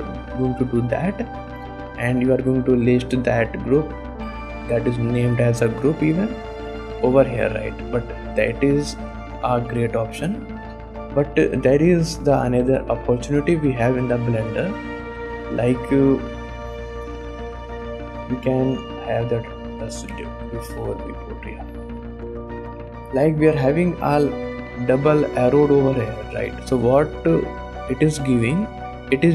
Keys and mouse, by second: 3.8 click, 8.3 ctrl+z, 8.6 ctrl+z, 8.9 ctrl+z, 9.3 ctrl+z, 13.2 click, 13.7 ctrl+Tab, 17.4 middle click, 17.9 middle click, 19.0-21.4 drag, 21.5 middle click, 21.9 shift+click, 22.1 drag, 22.6 shift+click, 23.1 click.